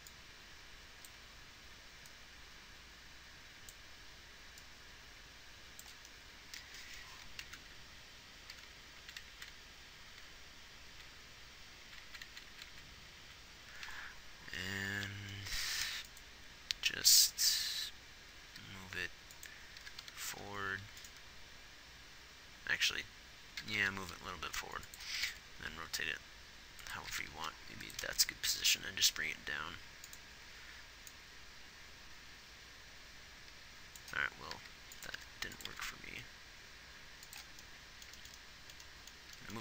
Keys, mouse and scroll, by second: 8.0 Left, 8.9 Left, 9.5 Right, 9.7 Right, 11.4 Right, 12.3 Right, 12.5 Right, 12.9 Right, 13.6 Right, 16.2 ctrl+s, 17.5 g, 18.9 g, 20.3 g, 25.5 r, 27.4 g, 28.3 g, 34.9 g, 35.5 r, 36.1 r.